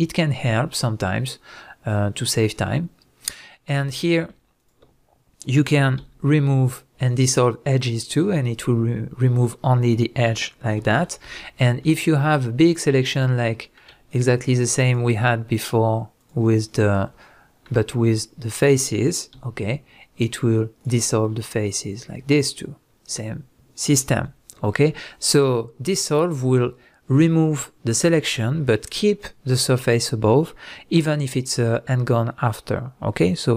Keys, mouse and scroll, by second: 4.6 shift+click, 6.0 x, 10.8 ctrl+z, 11.8-12.6 middle drag, 12.6 shift+drag, 13.1 shift+click, 13.6-14.1 middle drag, 14.1 shift+click, 14.5 shift+click, 14.8 shift+click, 15.6 shift+drag, 16.2 shift+drag, 16.7 shift+click, 17.2-33.5 middle drag, 19.3 x, 24.1 ctrl+z.